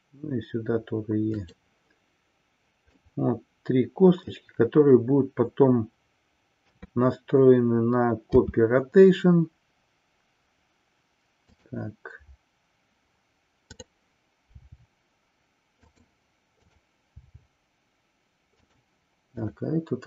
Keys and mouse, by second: 3.0-4.4 middle drag, 6.6 KP_3, 8.3 r, 11.6 click, 13.6-14.3 drag, 16.6 click, 17.2 g, 18.7 click, 19.3 click.